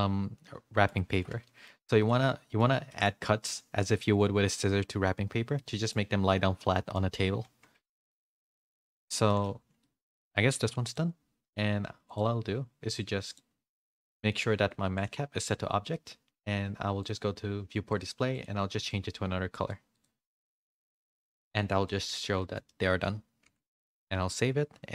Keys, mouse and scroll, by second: 1.4 middle click, 1.4 a, 2.0 middle click, 2.8 shift+middle click, 3.2 middle click, 3.7 middle click, 5.5 middle click, 6.9 middle click, 7.8 shift+middle click, 7.8 shift+a, 8.1 middle click, 9.2 middle click, 9.8 middle click, 9.8 a, 10.5 Tab, 10.8 click, 12.0 click, 13.2 click, 15.0-16.1 drag, 16.9 click, 17.9 click, 18.3 click, 19.9 click, 20.8 click, 22.3 middle click, 22.3 a, 22.6 shift+middle click, 23.4 ctrl+s.